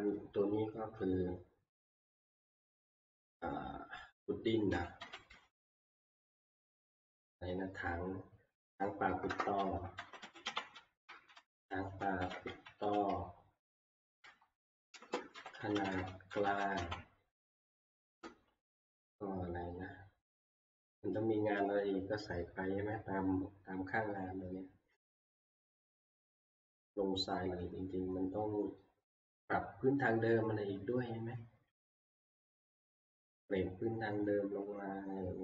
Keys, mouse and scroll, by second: 5.0-6.0 scroll down 6, 5.8-6.5 typing, 9.0-12.3 typing, 15.3-19.3 typing.